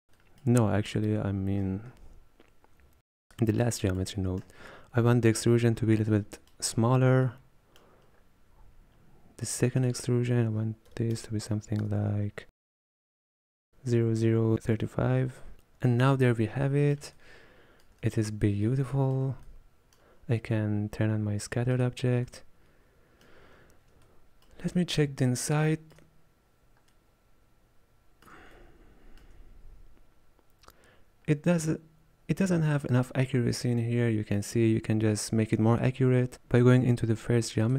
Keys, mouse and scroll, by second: 0.6-3.2 middle drag, 3.2-15.5 drag, 16.5-16.9 scroll down 3, 16.9-21.9 middle drag, 21.9 click, 22.9 middle click, 23.7-24.3 scroll up 5, 24.3-26.4 shift+middle drag, 26.4-27.3 scroll up 2, 27.3 scroll up 1, 27.5-37.5 middle drag.